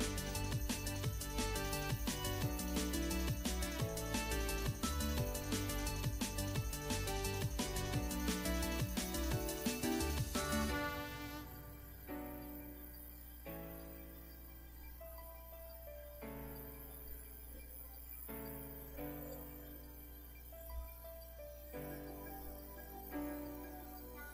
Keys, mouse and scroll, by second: 0.8 middle click, 1.6-2.4 scroll down 1, 2.4-4.4 right drag, 5.6 click, 7.4-24.3 drag.